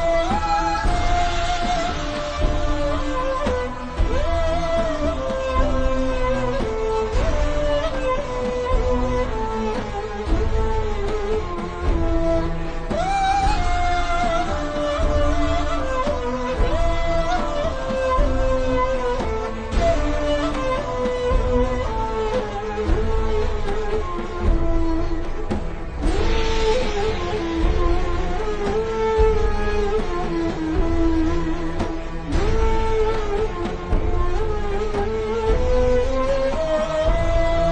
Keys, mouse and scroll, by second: 2.6-3.2 scroll down 2, 2.7 click, 6.1 alt+shift+Num_Lock, 6.1-6.9 alt+shift+scroll up 4, 6.5 click, 9.0-9.3 alt+shift+scroll down 2, 9.3 click, 12.0 BackSpace, 12.4 click, 13.3 z, 13.5 click, 15.0 click, 15.3 scroll up 1, 15.7 click, 15.9 a, 16.1 click, 16.6 v, 16.6 click, 17.2 a, 17.4 click, 18.3 z, 18.4 click, 20.1 v, 20.3 click, 21.0 z, 21.7 click, 22.8 v, 23.6 click, 26.6 v, 27.1 click, 27.4-29.1 alt+shift+scroll down 3, 30.0 click, 32.9-33.3 alt+scroll up 2, 33.6 v, 33.7 click, 36.0 p, 36.5 click, 37.1 v, 37.4 click.